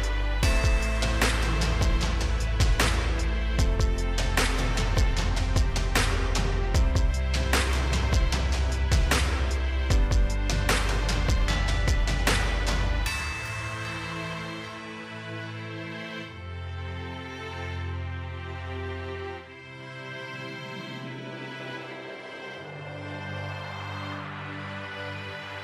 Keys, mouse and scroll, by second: 1.1 click, 5.4 8, 6.2 Return, 7.6 click, 8.3 right click, 9.0 click, 14.6 click, 16.6-17.2 scroll up 1, 18.0 right click, 20.5 click, 21.3-21.8 scroll down 2, 22.9 click, 25.2 click.